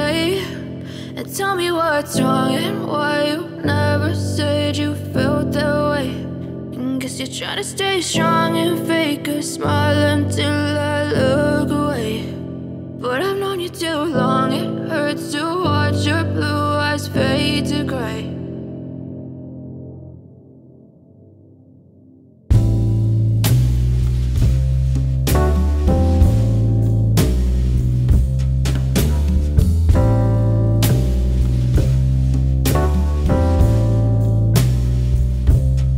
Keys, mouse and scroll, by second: 0.1-0.5 alt+scroll up 2, 2.2 alt+scroll up 1, 2.7 click, 4.4-4.9 alt+scroll down 1, 5.6 alt+scroll, 5.6 scroll, 5.8 alt+scroll down 1, 5.9 alt+scroll up 1, 6.0 scroll down 2, 6.1 scroll, 6.3 alt+scroll up 1, 6.4-6.8 alt+scroll down 1, 7.5 alt+scroll, 7.5-8.1 alt+scroll down 1, 8.6-11.5 drag, 11.5-13.7 drag, 15.0-16.4 typing, 17.0 click, 18.3-21.0 typing, 22.8 click, 26.7 click, 30.6 click, 32.3-35.9 drag.